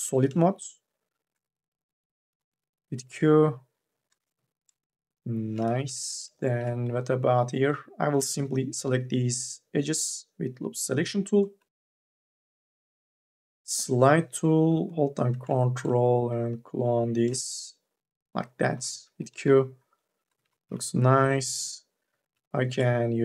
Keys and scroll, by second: 2.3 q, 4.1 n, 5.7 q, 6.6 2, 7.8 u, 8.3 l, 18.7 q, 20.5 q.